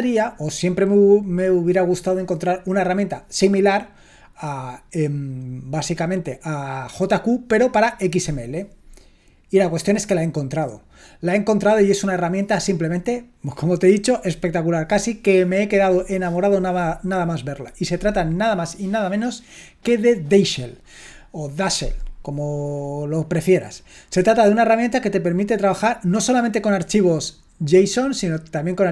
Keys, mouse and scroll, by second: 19.8-28.9 drag.